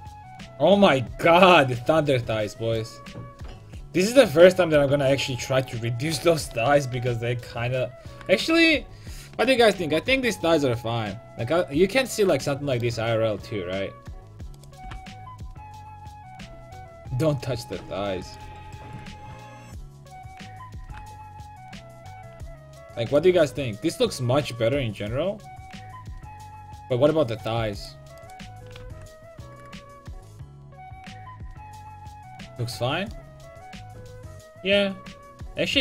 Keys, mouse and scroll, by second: 6.3 KP_5, 6.6 KP_1, 7.0 KP_5, 12.5-14.6 middle drag, 14.6-16.6 right drag, 14.9 g, 18.5 a, 20.1-22.0 right drag, 20.9 g, 22.3-24.4 drag, 22.5 a, 23.5 Tab, 27.8-32.1 right drag, 28.9 h, 33.2 middle click, 35.1-35.8 middle drag.